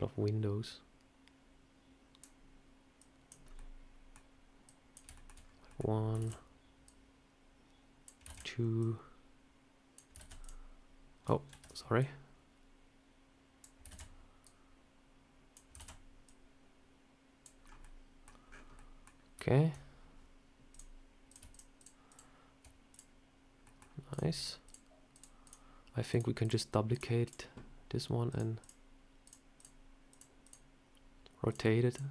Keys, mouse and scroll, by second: 2.9 click, 3.3 scroll up 2, 3.4 middle click, 4.5 click, 5.0 shift+middle click, 5.3 scroll down 2, 5.6 middle click, 6.1 shift+d, 6.7 click, 8.2 shift+d, 8.7 click, 10.1 shift+d, 11.4 ctrl+z, 11.9 click, 13.8 shift+d, 14.3 click, 15.7 shift+d, 16.1 click, 17.5-17.9 scroll down 3, 17.7 middle click, 18.3 scroll up 6, 18.6 middle click, 19.0 scroll down 1, 20.6 click, 21.2 click, 21.4 shift+click, 21.4 shift+click, 22.0 shift+click, 22.8 click, 23.5 scroll up 1, 23.5 middle click, 24.0 click, 24.5 shift+click, 26.1 shift+click, 27.0 shift+click, 27.1 shift+click, 28.3-30.7 shift+click.